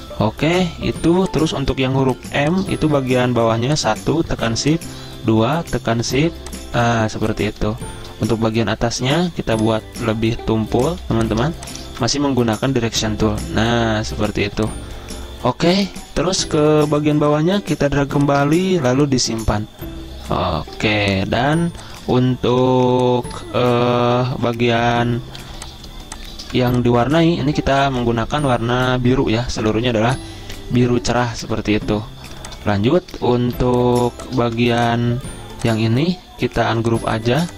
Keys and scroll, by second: 2.5-3.7 typing, 11.3-14.7 typing, 16.3 v, 23.7 z, 25.7-27.2 typing, 33.6 ctrl+z, 34.8 v.